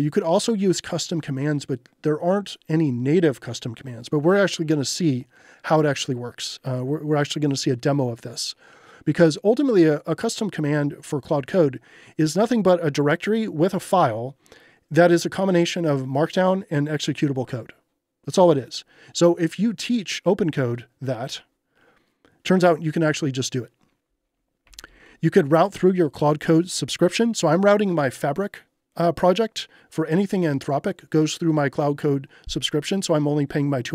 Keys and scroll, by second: 24.4-25.5 typing.